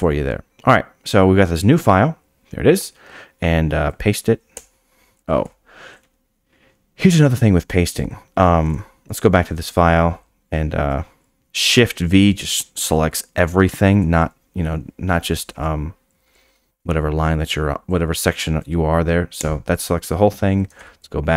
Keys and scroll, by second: 4.6 p, 5.4 u, 8.7 `, 9.5 shift+v, 19.4 y, 20.7 `.